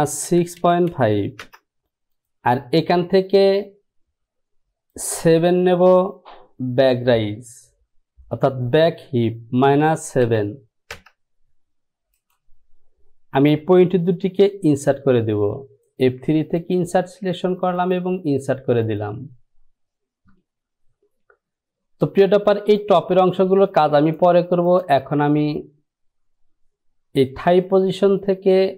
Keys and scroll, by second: 0.4 KP_6, 0.7 KP_Decimal, 1.1 KP_5, 1.6 Return, 9.8 KP_Subtract, 10.4 KP_7, 11.1 Return, 12.1 typing.